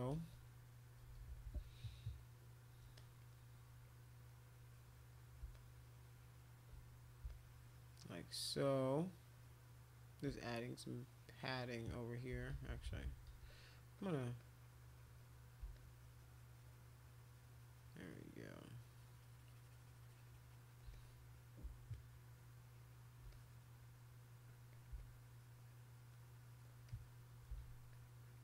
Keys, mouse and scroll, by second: 1.0-1.6 typing, 2.9 click, 4.2 click, 4.4 click, 5.1 shift+click, 5.5 shift+click, 6.6 shift+click, 6.8 click, 7.3-10.0 shift+drag, 10.4 click, 10.8-11.8 drag, 11.9 click, 12.0 click, 12.3 ctrl+z, 12.5 ctrl+z, 12.7 ctrl+z, 12.8 ctrl+z, 13.0 ctrl+z, 13.8 click, 14.0 click, 14.2 click, 14.4-15.5 drag, 15.7-20.7 shift+drag, 20.9 click, 21.9-23.2 shift+drag, 23.3 click, 24.4 click, 24.7 click, 25.0-26.7 shift+drag, 26.9 shift+click, 27.9 alt+click, 28.2 alt+click.